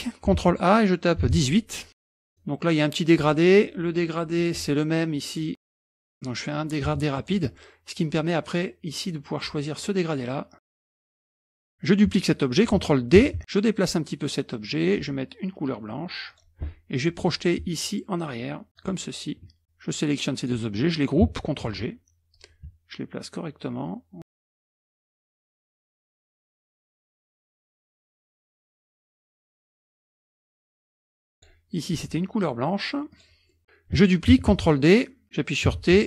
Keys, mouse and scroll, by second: 0.4 ctrl+a, 1.2 KP_1, 2.1 click, 2.2 middle click, 4.4 click, 5.2 click, 5.9-7.4 drag, 11.6 click, 13.2 ctrl+d, 13.4 click, 16.3 click, 18.8 click, 19.6-20.9 drag, 21.7 ctrl+g, 25.0 ctrl+click, 25.3 ctrl+click, 25.5 click, 25.6 ctrl+a, 25.7 click, 25.9 click, 26.1 scroll down 2, 26.3 click, 26.4 KP_0, 26.5 click, 27.1 KP_Subtract, 27.1 KP_Enter, 27.5 KP_Subtract, 28.0 F1, 28.7 ctrl+a, 29.0 KP_1, 29.0 KP_Enter, 29.1 F1, 29.4 Delete, 29.6 ctrl+d, 29.7 click, 30.0 click, 30.3 ctrl+g, 30.3 click, 30.9 middle click, 30.9 scroll up 1, 31.0-31.9 scroll down 2, 31.1 ctrl+click, 31.9 click, 33.1 click, 33.5 scroll down 1, 34.6 ctrl+d, 35.8 t.